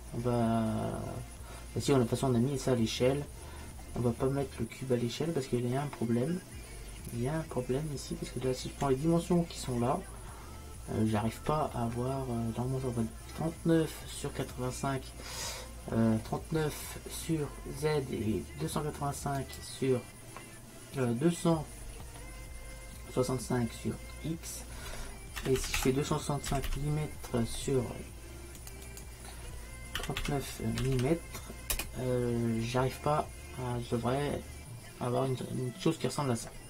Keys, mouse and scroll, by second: 6.9 middle click, 7.1 middle click, 9.4-12.0 middle drag, 12.2 middle click, 14.0 middle click, 19.5-21.4 drag, 26.7 m, 28.9-31.0 drag, 31.0 m.